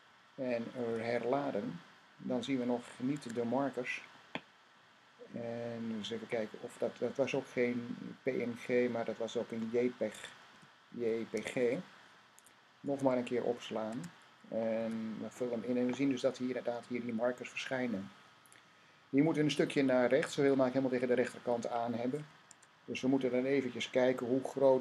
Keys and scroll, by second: 0.6 r, 3.0 Tab, 10.4-11.2 typing, 12.7 typing, 13.7 Tab, 14.6 r, 22.3 Tab.